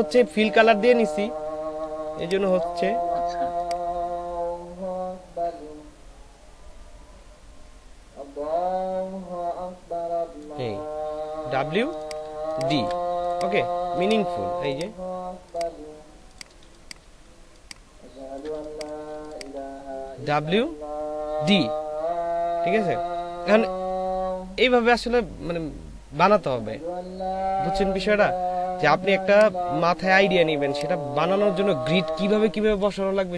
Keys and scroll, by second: 2.1 space, 12.3 ctrl+alt+space, 16.6 shift+space, 17.2 alt+shift+space, 18.5 alt+shift+space.